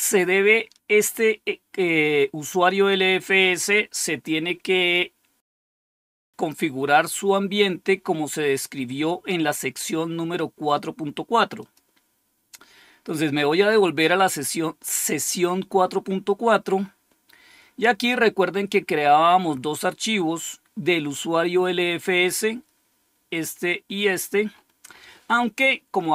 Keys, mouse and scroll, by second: 11.5 click, 18.6 scroll down 1, 19.4-21.5 scroll up 1, 21.5-21.9 scroll down 2, 22.3-23.3 scroll down 2, 23.5 scroll down 2, 24.1-24.5 scroll down 2, 24.5-26.1 scroll up 1.